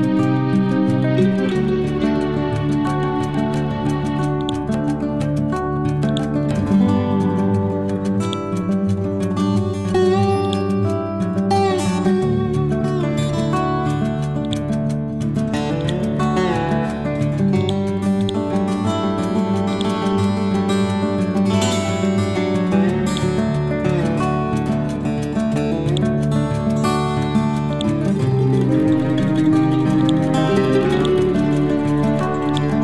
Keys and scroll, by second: 6.5 Left.